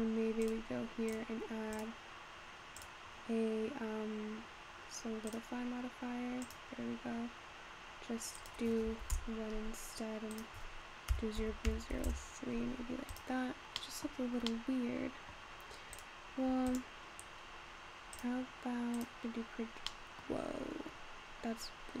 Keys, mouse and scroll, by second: 0.4 click, 1.1-1.8 drag, 2.8-5.9 drag, 6.5 click, 7.2-8.4 scroll down 2, 8.4-13.2 drag, 13.6 scroll down 2, 13.8-14.2 middle drag, 14.2 scroll up 3, 14.5-16.0 middle drag, 16.0 click, 16.7 click, 18.2-19.5 drag, 19.5-20.0 scroll down 4, 20.0-20.9 middle drag, 20.9-22.0 scroll down 2.